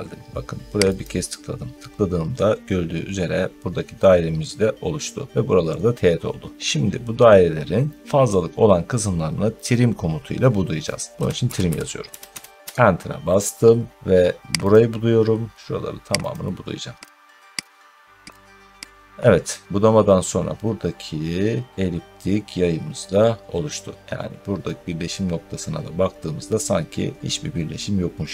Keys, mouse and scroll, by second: 0.9 click, 1.8 scroll down 2, 2.7 scroll down 2, 11.1-12.6 typing, 13.7 middle click, 13.8 middle click, 14.5 click, 16.1 click, 17.0 click, 17.2 scroll down 1, 17.6 click, 18.3 click, 18.8 click, 23.8 scroll, 23.9 scroll up 1, 23.9 scroll, 24.0-24.4 scroll up 1, 27.9 middle click.